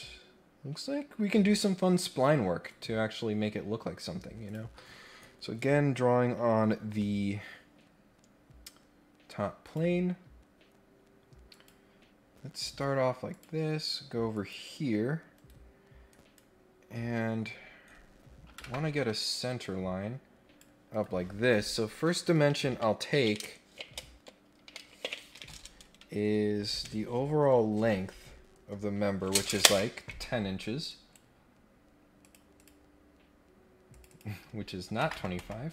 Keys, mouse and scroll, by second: 2.7 click, 4.4 click, 9.6 click, 11.5 click, 13.3 click, 14.3 click, 15.3 Escape, 16.0 right click, 17.5-18.0 scroll down 3, 18.9 scroll down 1, 19.6-20.6 drag, 20.9 Escape, 30.9 right click, 32.2 click, 32.6 click, 33.9 click.